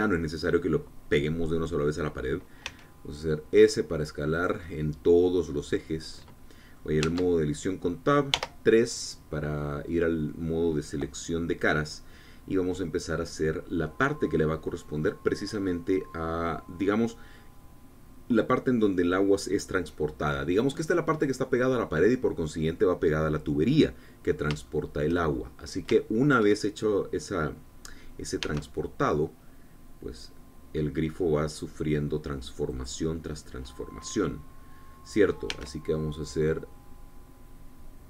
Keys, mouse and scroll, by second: 3.3 s, 5.0 click, 5.3-7.6 middle drag, 7.7 Tab, 9.0 3, 9.8 click, 10.2-11.3 middle drag, 21.1 middle click, 24.5 middle click, 24.5 click, 25.3 shift+click, 26.0-26.5 shift+scroll up 3, 26.6 shift+click, 29.1 e, 33.4 click, 36.2 e.